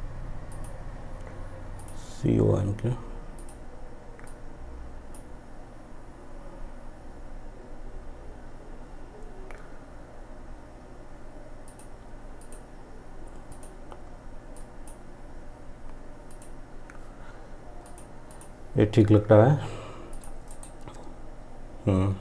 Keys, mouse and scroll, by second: 10.7-15.4 drag, 15.4 click, 19.5 right click.